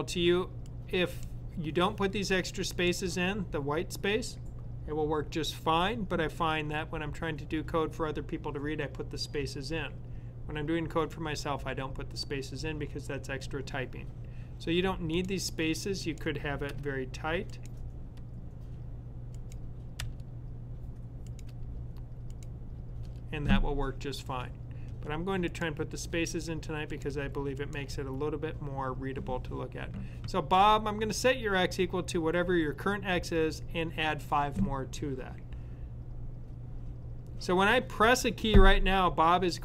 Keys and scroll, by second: 16.6 F13.